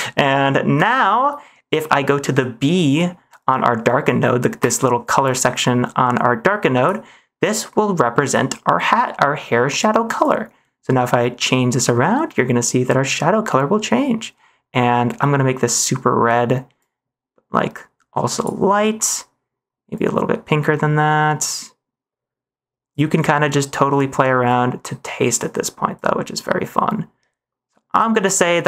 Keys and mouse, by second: 0.8 ctrl+s, 1.9 middle click, 4.5 click, 28.4 middle click.